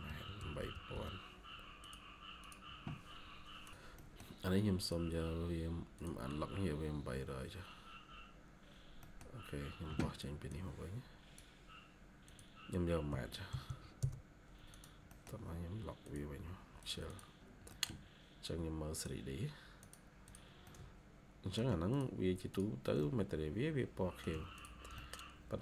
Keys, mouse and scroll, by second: 0.0-0.8 typing, 3.9 middle click, 5.0-6.0 scroll up 1, 8.0-8.5 scroll down 1, 8.9 middle click, 11.6 scroll up 1, 13.0-13.4 typing, 13.9 Return, 15.0 middle click, 15.2 scroll down 1, 17.0 double click, 17.3 scroll down 1, 17.6 middle click, 17.8 scroll down 1, 20.1 double click, 20.5 middle click, 22.9 middle click, 24.9 shift+middle click.